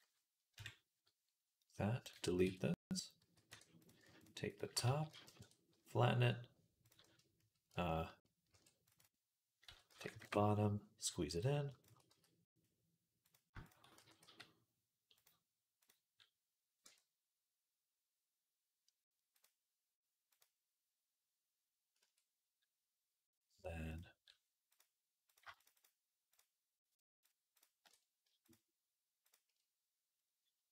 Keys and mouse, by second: 0.4 KP_1, 0.7-1.9 middle drag, 1.9 click, 2.1 x, 2.6 click, 3.1-11.2 middle drag, 3.1 x, 3.6 click, 4.0 alt+shift+click, 4.3 click, 4.7 s, 6.7 click, 8.3 ctrl+r, 9.5 s, 11.2 click, 11.4 shift+middle click, 11.6 click, 11.9 s, 12.5 middle click, 13.1 click, 15.6 click, 15.6 s, 16.7 Tab, 19.2-23.8 drag, 21.8 Tab, 23.8 middle click, 24.5 click, 24.6 middle click, 25.1 click, 25.2 shift+middle click, 25.4-26.8 alt+shift+drag, 26.8 alt+shift+middle click, 27.4 alt+shift+click, 27.8 shift+middle click, 28.3-29.4 shift+drag, 29.4-30.7 middle drag.